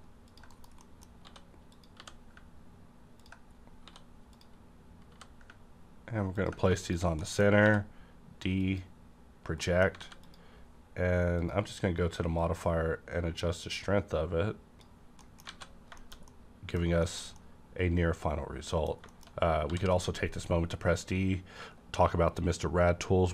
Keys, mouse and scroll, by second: 0.3 click, 0.8 middle click, 1.2 s, 1.7 click, 1.7 s, 1.9 g, 3.2 ctrl+click, 3.5 scroll up 1, 3.7 scroll down 1, 3.8 s, 4.3 click, 5.1 g, 6.3 ctrl+click, 6.8 ctrl+click, 7.2 middle click, 7.4 scroll up 1, 8.6 click, 8.6 d, 9.6 middle click, 10.0 alt+a, 10.2 click, 11.4-15.5 drag, 15.2 middle click, 15.5 alt+a, 15.7 scroll down 1, 16.0 shift+middle click, 17.0 middle click, 17.4-19.1 middle drag, 19.1 shift+middle click, 19.3-19.8 shift+scroll up 2, 19.7 d.